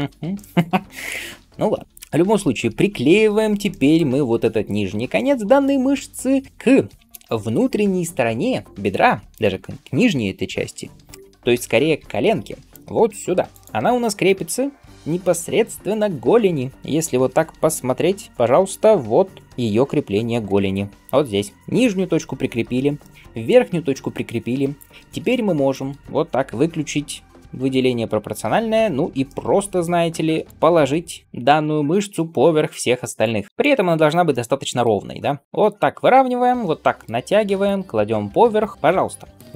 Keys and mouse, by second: 0.0-24.6 shift+middle drag, 11.8 g, 24.6 click, 24.7-27.9 shift+middle drag, 26.8 g, 27.9 click, 28.0-30.3 middle drag, 28.3 g, 30.3 click, 30.5 ctrl+g, 30.5-31.9 middle drag, 31.2 g, 35.1 g, 35.4 g, 38.1-39.5 middle drag, 39.1 g.